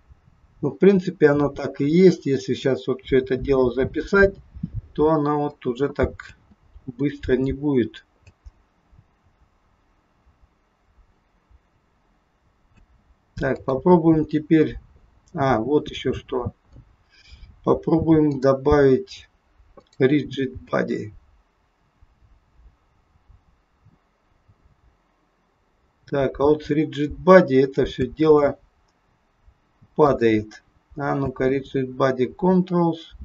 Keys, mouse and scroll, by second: 6.3 space, 8.3 space, 12.8 space, 13.4 click, 16.2-18.3 scroll up 10, 18.3 click, 19.7 click, 20.7 space, 28.0 space, 30.0 click, 31.2 space.